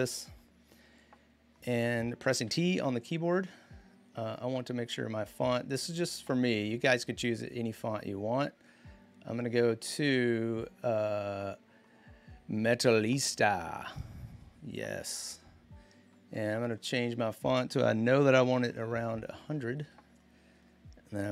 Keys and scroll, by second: 2.2 t, 18.0-19.1 typing, 19.6 Return, 20.2-20.9 typing.